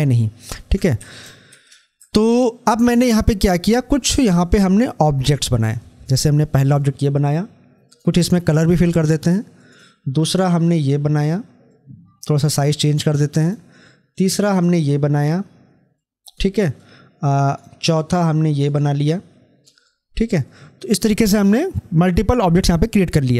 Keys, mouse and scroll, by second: 9.4 right click, 13.2 right click, 16.6 click, 17.5 right click.